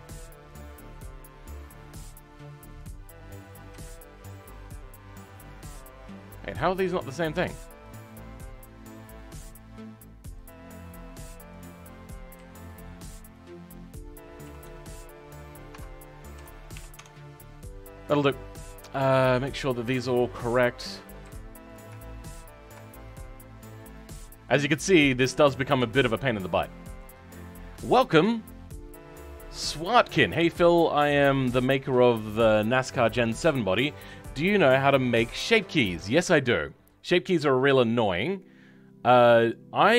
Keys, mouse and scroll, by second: 5.4 click, 6.4 click, 12.3 a, 13.6 click, 14.4 s, 16.4 s, 20.4 click, 21.2 g, 23.9 click, 24.5 g.